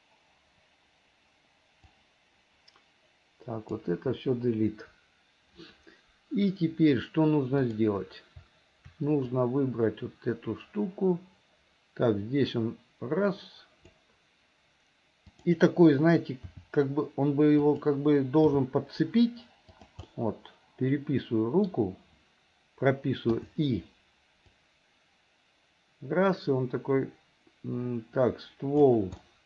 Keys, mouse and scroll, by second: 1.8-3.8 drag, 4.2 Delete, 7.6 click, 9.4-14.1 drag, 15.3 click, 16.6 r, 18.5 g, 20.1-21.7 middle drag, 21.7 scroll down 1, 23.4 i, 24.6-29.0 drag, 29.2-29.4 middle drag.